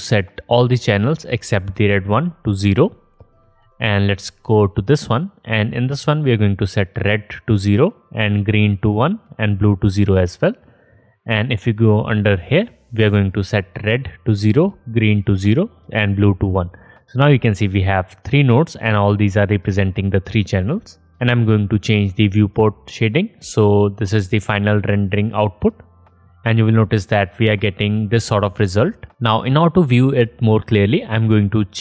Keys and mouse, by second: 4.8 middle click, 11.2 middle click, 12.4 middle click, 24.0 middle click, 24.3-31.8 drag.